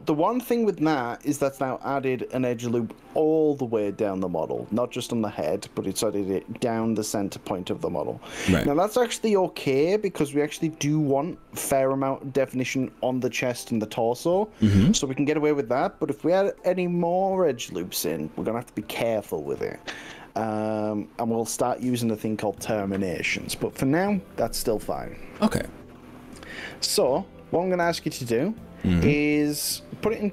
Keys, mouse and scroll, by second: 1.8 right click, 2.8 click, 3.4 click, 4.9-5.8 scroll down 6, 6.1-6.8 scroll up 4, 7.2 scroll up 3, 9.7 scroll down 1.